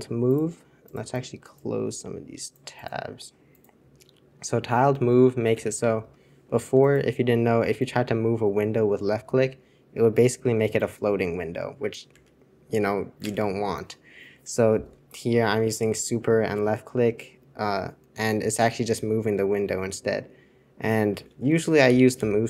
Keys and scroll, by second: 5.6 super+1, 12.2 super+2, 13.2 super+1, 22.0 super+j, 22.1 super+j.